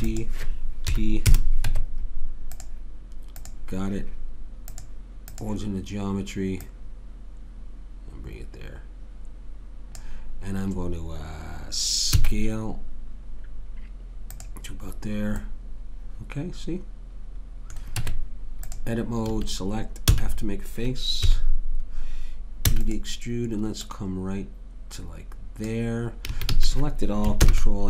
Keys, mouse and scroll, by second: 0.9 p, 1.7 Tab, 12.2 s, 15.4-17.0 middle drag, 18.0 Tab, 19.3 a, 20.1 f, 21.3 KP_3, 22.7 e, 23.8 click, 26.3 a, 26.5 a, 27.4 ctrl+n.